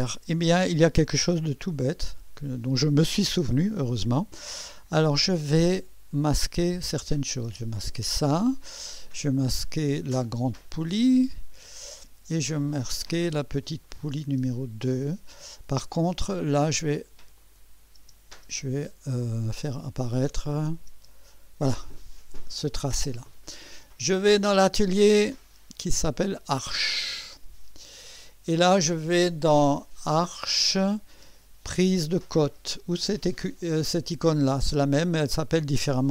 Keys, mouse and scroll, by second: 1.5-2.2 typing, 6.9 click, 7.5 space, 9.6 click, 11.9 space, 13.8 click, 14.3 space, 16.4 click, 17.4 click, 18.0 space, 18.4 space, 19.3 click, 20.8 space, 21.0 space, 24.6 click, 26.6 click, 30.3 click.